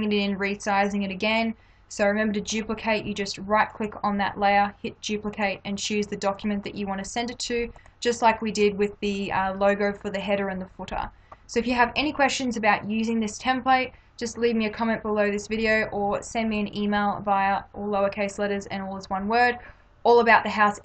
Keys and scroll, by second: 2.5 space.